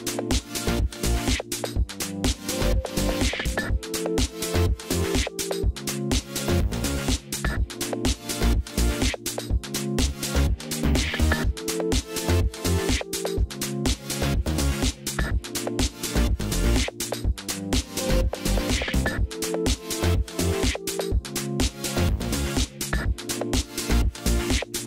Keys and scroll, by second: 13.0 ctrl+z.